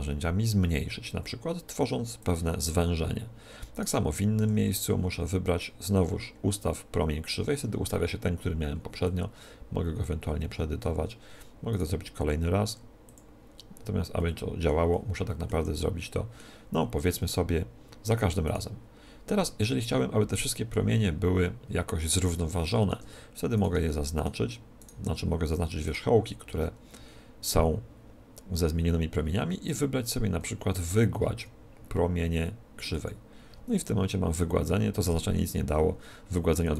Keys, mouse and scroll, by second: 3.6-5.7 right drag, 4.3 w, 9.0-10.7 drag, 11.6-13.6 right drag, 12.6 w, 14.1-17.4 middle drag, 18.4-20.3 right drag, 21.6-24.1 middle drag, 23.5-27.7 right drag, 29.4 w, 36.6-36.7 right drag.